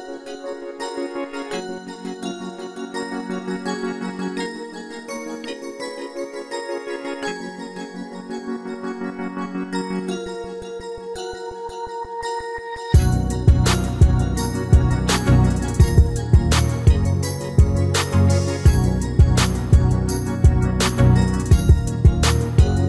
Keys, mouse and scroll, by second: 1.1-2.0 scroll down 1, 2.0-3.9 middle drag, 3.3-5.1 drag, 4.4 shift+a, 8.3-9.8 middle drag, 9.8 s, 14.1-16.2 middle drag, 15.5 s, 16.8-20.2 middle drag, 20.2-22.8 drag, 22.7-22.8 middle drag.